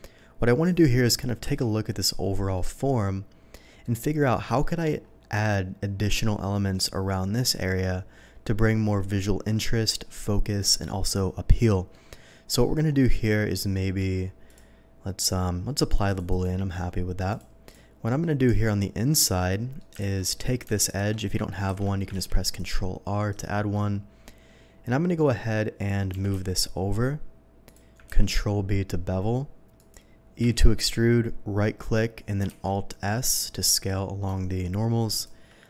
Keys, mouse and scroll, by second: 1.6 KP_7, 2.5-3.5 middle drag, 3.8 middle drag, 4.6 middle drag, 11.9 middle drag, 12.6 scroll down 1, 12.9-13.7 middle drag, 14.1 scroll up 1, 14.4 click, 16.0 click, 16.3 click, 17.3 click, 17.6 click, 18.0 middle click, 18.5 Tab, 19.1 middle click, 20.0 alt+a, 20.2 alt+middle click, 20.8 alt+click, 21.7 ctrl+x, 22.2 ctrl+r, 22.5 click, 23.3 right click, 23.7-25.2 middle drag, 26.1 g, 26.3 x, 26.5 g, 27.6 click, 28.0 ctrl+b, 29.7 click, 30.4 e, 31.6 right click, 32.5 alt+s, 35.1 shift+click.